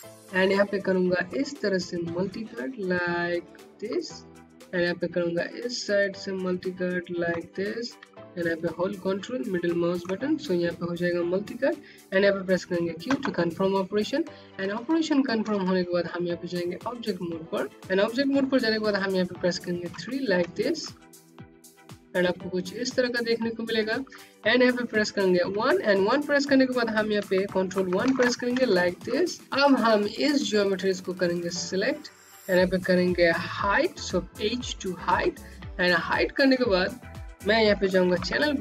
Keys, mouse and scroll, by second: 3.1 click, 3.3 Home, 5.3 Home, 7.6 ctrl+middle click, 12.0 q, 12.4 scroll down 1, 14.3 right click, 16.9 3, 17.7 click, 18.3 3, 18.9 scroll down 1, 19.4 click, 19.6 Home, 23.9 1, 26.4 ctrl+1, 27.1 scroll down 1, 27.5 click, 29.4 click, 33.4 h, 34.3-34.8 scroll down 1, 34.8 click, 36.4 alt+c.